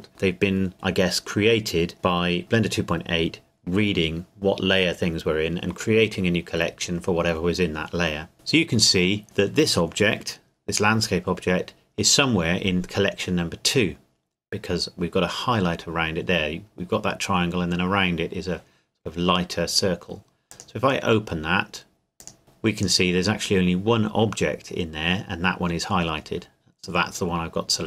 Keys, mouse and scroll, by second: 20.5 click.